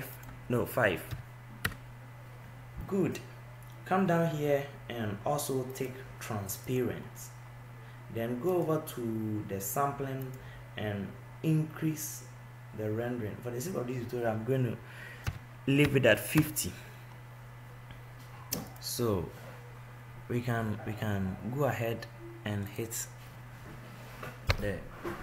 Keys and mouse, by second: 21.4-24.3 middle drag.